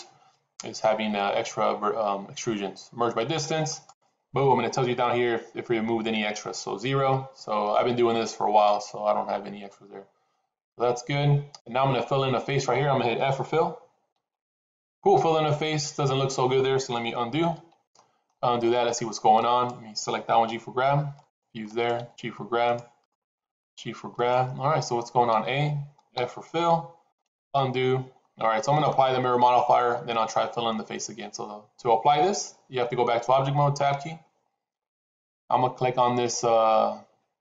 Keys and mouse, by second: 14.0 f, 17.3 ctrl+z, 17.8 shift+middle click, 19.3 click, 20.4 g, 21.6 click, 21.9 g, 22.9 click, 23.3 g, 25.2 a, 26.0 f, 27.3 ctrl+z, 33.7 Tab.